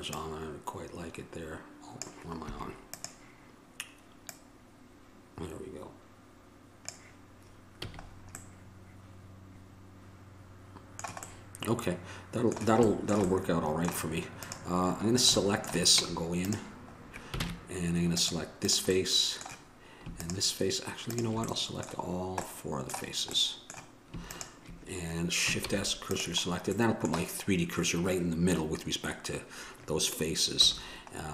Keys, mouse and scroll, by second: 2.7 Escape, 3.1-6.0 drag, 8.0 a, 8.7-12.2 middle drag, 13.3 middle click, 13.7 middle click, 14.6-16.2 right drag, 14.8-16.8 drag, 16.2 Tab, 17.6 ctrl+Tab, 25.9 shift+s, 30.8 a.